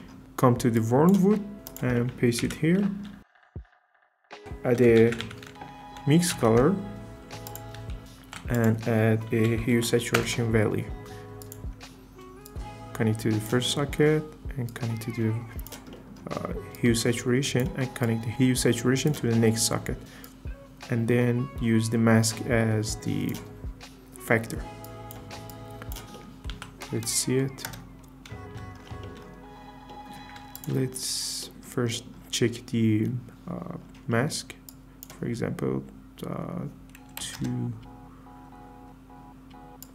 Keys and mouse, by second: 1.5 Tab, 1.5 ctrl+c, 2.1 click, 2.3 Tab, 3.2 ctrl+v, 4.3 g, 4.4 shift+a, 7.5 drag, 8.1 shift+a, 8.2 shift+a, 11.4 click, 12.5 drag, 15.9 click, 16.7 click, 18.0 drag, 20.2 drag, 26.1 click, 26.5 z, 27.7 KP_0, 29.9 click, 30.6 ctrl+shift+click, 31.9 middle click, 34.9-37.6 drag, 39.8 click.